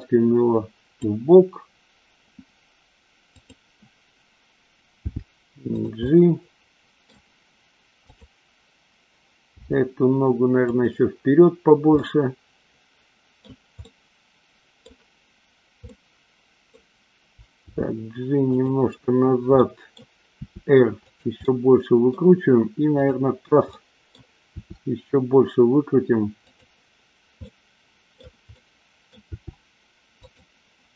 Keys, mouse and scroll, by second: 4.9 g, 5.8 click, 6.0-7.0 middle drag, 7.9 click, 9.4 g, 10.7 click, 11.9-13.4 middle drag, 11.9 scroll up 1, 13.8-14.8 middle drag, 15.9-16.8 middle drag, 16.7 scroll down 1, 17.7 g, 18.4 click, 19.5 scroll up 1, 19.6 middle click, 20.4 r, 21.0 click, 21.4 middle click, 22.9 click, 23.8-24.2 middle drag, 24.5 r, 27.4-28.0 middle drag, 28.6 middle click, 29.2 r, 30.2 click.